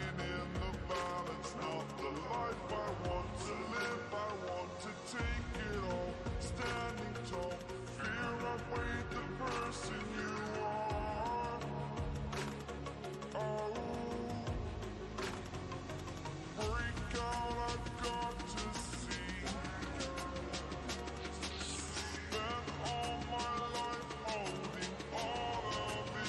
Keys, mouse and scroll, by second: 1.4 ctrl+space, 1.6 ctrl+click, 1.9-2.4 ctrl+space, 4.1-6.3 drag, 7.9 click, 9.1 right click, 10.0 click, 12.3 right click, 13.9 click, 19.2-22.8 drag, 23.2-25.1 shift+drag.